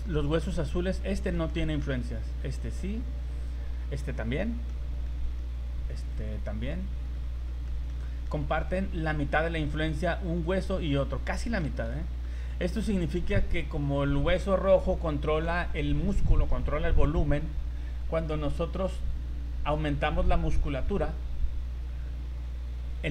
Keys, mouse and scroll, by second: 0.2 right click, 1.5 shift+middle click, 2.5 right click, 2.7 scroll up 2, 3.4 right click, 4.5 middle click, 5.1 middle click, 6.2 right click, 6.7 scroll down 3, 7.1 middle click, 7.7 shift+middle click, 8.0 middle click, 8.4 shift+middle click, 8.8 scroll up 3, 9.7 right click, 10.5 right click, 11.3 shift+middle click, 11.6 z, 11.9 middle click.